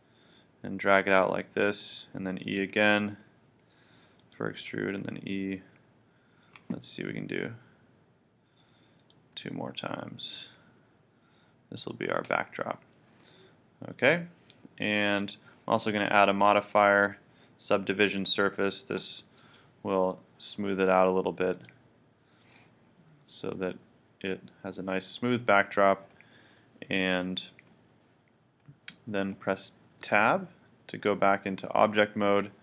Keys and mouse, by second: 1.9-3.8 drag, 2.7 e, 4.3 click, 4.6 e, 9.1 click, 9.4 e, 11.9-13.0 drag, 13.0 middle click, 13.9-15.0 middle drag, 16.5-18.1 drag, 21.5-25.5 drag, 30.0 Tab.